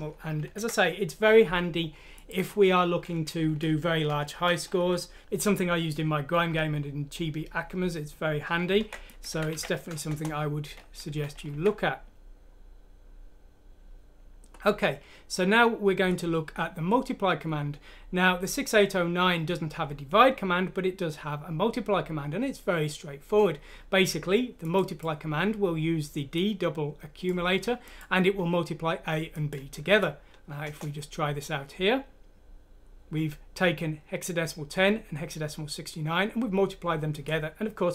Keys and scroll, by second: 0.5 ctrl+Home, 4.1 shift+Home, 4.8 ;, 8.8 ctrl+c, 10.1 Return, 11.1 Escape, 11.5 F3, 29.9 F6, 30.7 Return.